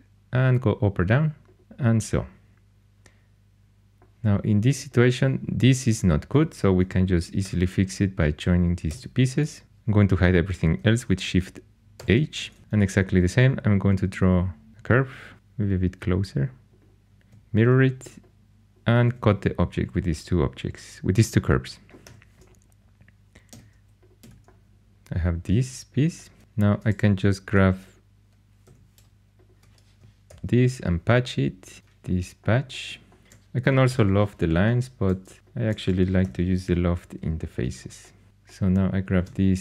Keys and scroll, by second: 7.4 4, 8.6-9.3 typing, 11.9 shift+h, 12.6 shift+a, 15.3 g, 17.3 alt+x, 19.0 2, 21.6-23.4 typing, 26.4 2, 28.6 2, 30.2 shift+super+p, 33.8 shift+super+p, 36.2 shift+super+p, 38.3 3.